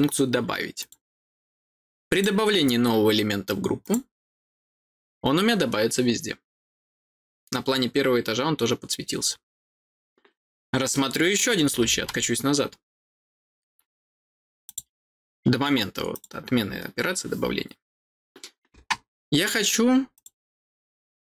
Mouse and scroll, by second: 0.7 click, 2.1 click, 3.8 click, 14.6 click, 16.1 click, 20.1 click, 21.2 click.